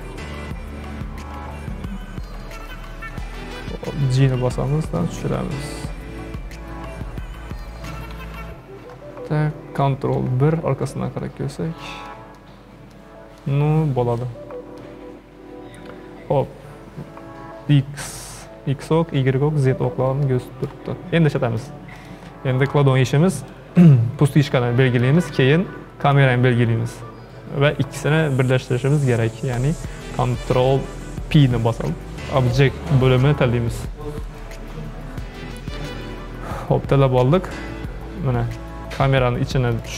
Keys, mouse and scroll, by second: 0.4 KP_1, 0.8 KP_3, 1.5-2.5 scroll up 12, 2.5-4.5 shift+middle drag, 4.5 g, 8.1 KP_1, 10.1 ctrl+KP_1, 10.9 scroll down 4, 11.5-13.0 scroll down 17, 12.0-12.4 middle drag, 13.0-13.5 middle drag, 13.5-14.2 scroll up 6, 14.2 middle click, 14.9-18.3 scroll down 5, 20.2-21.6 shift+middle drag, 21.6 click, 22.0 click, 23.4 click, 24.5-26.1 shift+middle drag, 26.1 shift+click, 31.3 ctrl+p, 39.7 click.